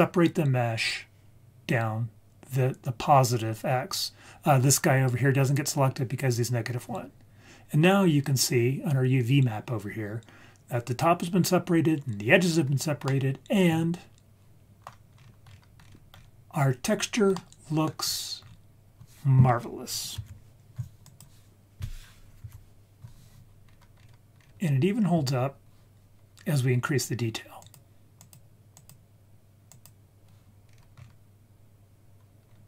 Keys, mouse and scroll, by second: 7.4-8.1 scroll up 3, 8.1-8.6 scroll down 1, 13.0-14.8 middle drag, 15.1-16.9 scroll up 8, 17.3-17.8 middle drag, 17.8-19.2 scroll down 4, 20.1 KP_Decimal, 21.0 click, 22.4 KP_Decimal, 23.4 scroll down 1, 23.6 scroll up 1, 23.8 scroll down 1, 24.6 scroll down 4, 25.2-26.4 scroll down 2, 26.4-27.6 scroll up 3, 27.6 click, 28.2 click, 28.7 click, 29.7 click, 30.6-31.4 scroll up 4, 32.4-32.6 scroll down 2.